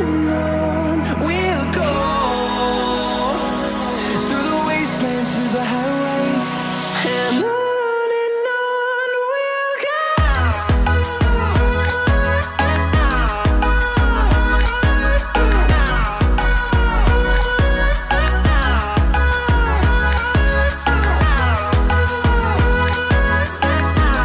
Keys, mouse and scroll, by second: 1.2-6.6 drag, 6.6 scroll up 1, 8.2-19.4 drag, 20.2-21.0 scroll down 1, 21.0-21.6 scroll up 1, 21.6-22.9 scroll down 1, 22.9 click.